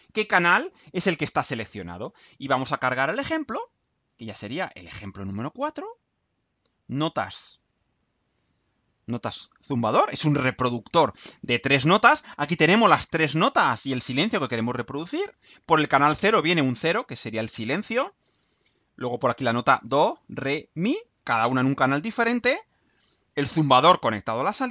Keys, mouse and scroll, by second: 7.2 click, 7.6 middle click, 8.6-10.1 right drag, 10.4 scroll down 1, 10.8-12.2 right drag.